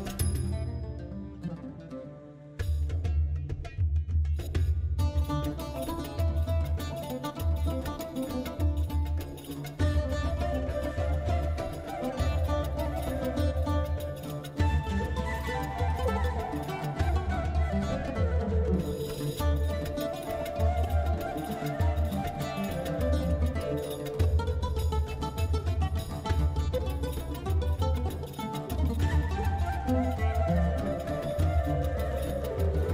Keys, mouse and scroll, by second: 27.3 ctrl+i.